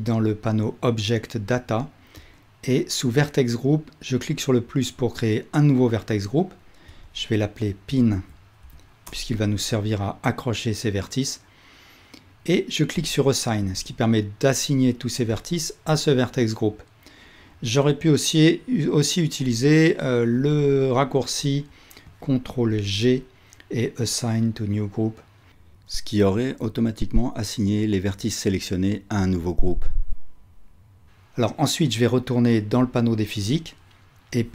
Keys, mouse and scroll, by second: 1.3-2.3 drag, 7.0 click, 22.5-32.9 ctrl+drag, 22.7 ctrl+g, 33.1-34.5 drag.